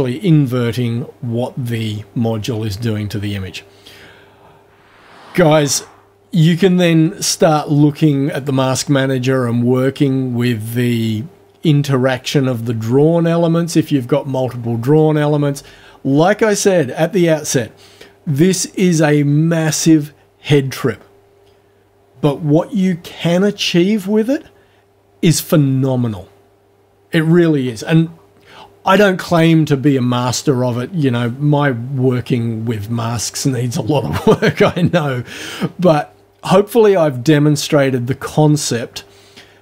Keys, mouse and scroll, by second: 8.4 click, 14.9 click.